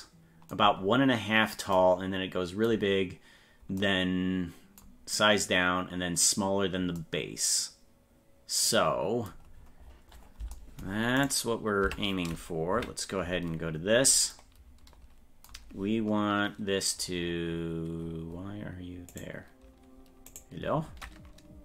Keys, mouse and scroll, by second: 9.6-10.2 scroll down 12, 11.2 right click, 11.9 Tab, 12.8 KP_Decimal, 13.7-14.3 scroll down 8, 17.2-18.0 scroll down 4, 18.0-18.8 scroll up 6, 19.1 right click, 20.4 right click.